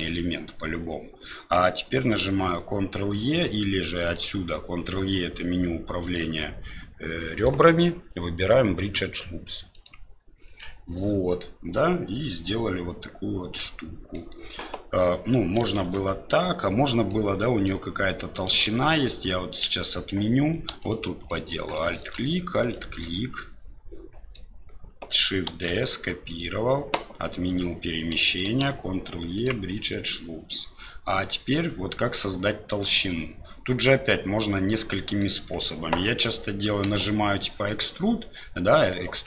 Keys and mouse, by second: 4.0-5.5 drag, 6.1-9.9 drag, 10.7-14.2 middle drag, 15.8 ctrl+z, 17.1 middle click, 18.6 ctrl+z, 19.8 ctrl+z, 20.8 right click, 21.3 middle click, 22.6 right click, 23.1-24.4 middle drag, 25.5 shift+d, 28.4 ctrl+e, 30.0 middle click, 33.9-35.2 middle drag, 36.8 e.